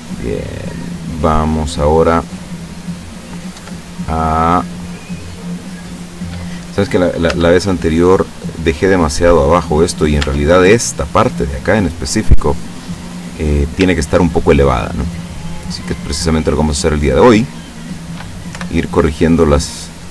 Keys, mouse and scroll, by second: 2.8 middle click, 3.6 Tab, 4.0-6.8 middle drag, 7.6 Tab, 7.6-8.6 middle drag, 8.9-9.6 middle drag, 9.8-10.3 middle drag, 10.3 Tab, 11.4 middle click, 13.2 right click, 14.1 shift+right click, 14.9 shift+right click, 15.7 shift+right click, 16.0-17.7 shift+middle drag, 18.6 o, 19.5-20.1 drag.